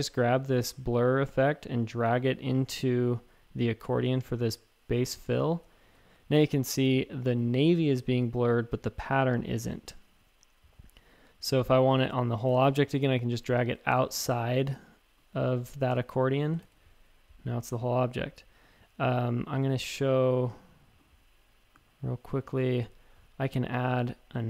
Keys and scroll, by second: 5.8 shift+super+a, 16.6 shift+super+a.